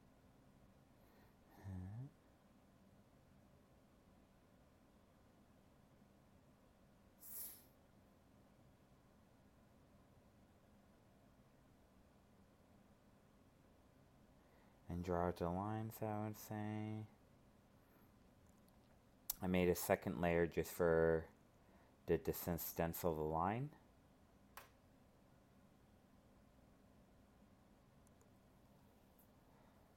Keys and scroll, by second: 22.5 ctrl+z, 27.5 ctrl+z.